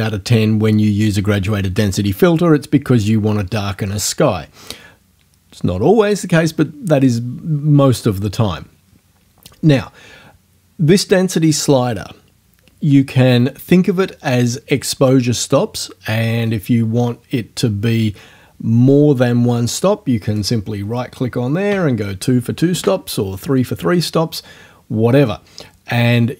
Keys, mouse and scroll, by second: 20.4 right click, 21.7 KP_2, 22.7 KP_Enter.